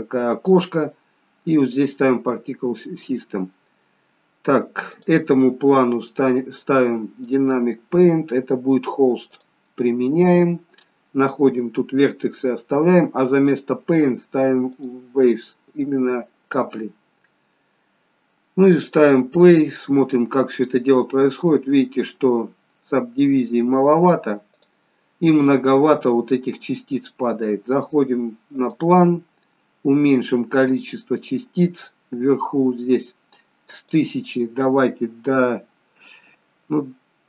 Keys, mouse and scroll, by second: 0.5 click, 2.6-3.0 scroll down 3, 4.9 click, 7.3 click, 9.3 click, 9.9-10.4 scroll down 3, 12.3-13.4 scroll down 5, 18.8 click, 19.7-21.5 scroll up 2, 21.5 middle click, 21.5-22.8 scroll up 1, 24.6 click, 25.3-27.6 scroll down 2, 28.6 click, 31.1 click, 32.1-33.7 scroll up 10, 33.7 click.